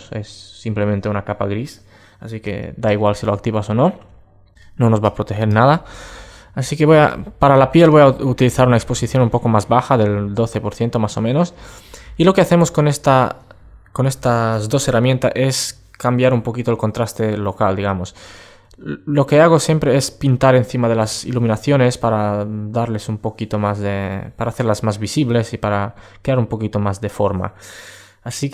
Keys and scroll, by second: 3.4 super+space, 12.1 super+space.